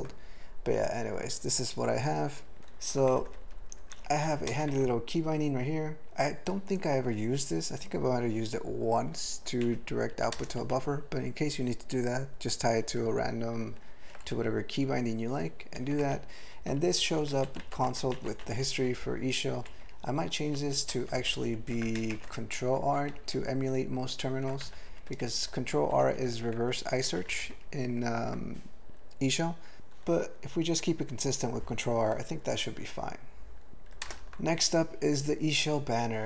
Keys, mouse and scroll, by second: 2.5 ctrl+n, 2.6 ctrl+g, 3.1 alt+b, 3.3 alt+b, 3.4 alt+b, 3.6 alt+b, 3.8 alt+b, 4.5 ctrl+space, 4.7 ctrl+alt+b, 9.0 ctrl+g, 9.6 ctrl+b, 10.1 ctrl+f, 10.3 ctrl+space, 15.7 ctrl+g, 16.0 ctrl+n, 16.6 ctrl+f, 16.7 ctrl+f, 16.9 ctrl+f, 17.3 ctrl+alt+b, 17.6 ctrl+alt+b, 17.7 ctrl+alt+f, 17.8 ctrl+alt+b, 18.0 ctrl+alt+f, 18.1 ctrl+alt+b, 18.3 ctrl+alt+f, 18.4 ctrl+alt+b, 18.7 ctrl+alt+f, 19.7 ctrl+alt+b, 20.4 ctrl+f, 20.7 ctrl+f, 21.0 ctrl+f, 21.2 ctrl+f, 21.3 ctrl+f, 21.5 ctrl+f, 21.7 ctrl+d, 22.2 typing, 24.1 ctrl+e, 24.6 alt+m, 24.8 alt+f, 25.0 alt+f, 25.2 alt+f, 25.4 alt+f, 25.6 alt+f, 25.9 alt+f, 26.8 ctrl+alt+f, 27.1 ctrl+alt+b, 27.2 ctrl+alt+f, 27.3 ctrl+alt+b, 27.4 ctrl+alt+f, 33.7 alt+m, 34.0 ctrl+space.